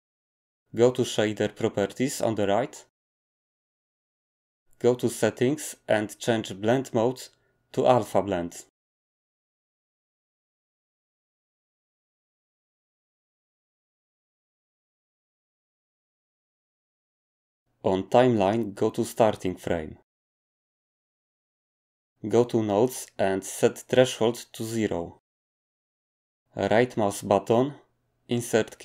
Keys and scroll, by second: 25.3 0, 25.5 Return.